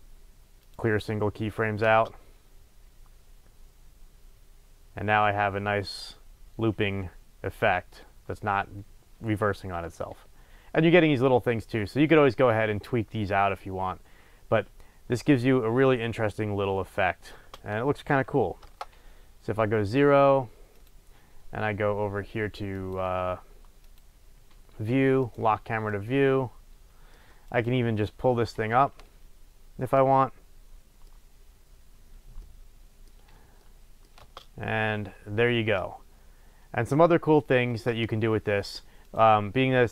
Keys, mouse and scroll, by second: 1.8 space, 17.4 space, 18.6 KP_0, 20.8-22.9 drag, 23.8 click, 25.2 click, 25.8-27.5 middle drag, 27.5 click, 30.0-39.3 middle drag, 31.1-32.4 scroll up 2, 33.2-33.6 scroll down 2, 37.7 space, 39.3 click.